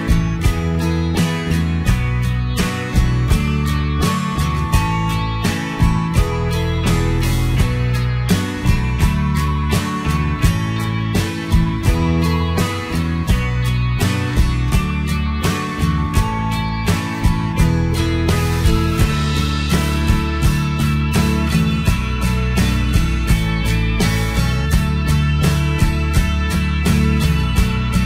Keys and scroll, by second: 18.9 ctrl+a.